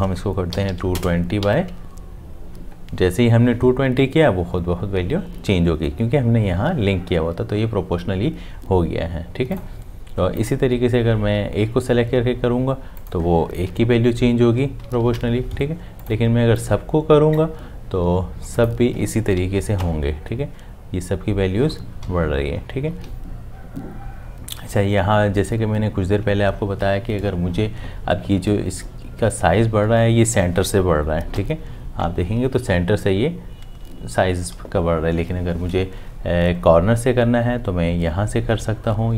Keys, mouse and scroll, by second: 0.5 2, 1.4 Tab, 13.7 Up, 19.8 Up, 23.0 Down, 23.5 Down, 31.3 Up, 34.5 Down.